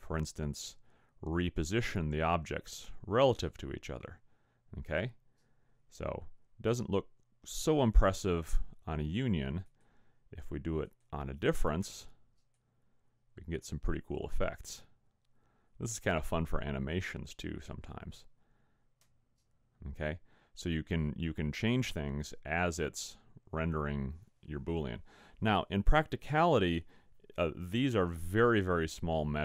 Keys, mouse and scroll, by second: 0.2 click, 9.7 click, 12.5 click.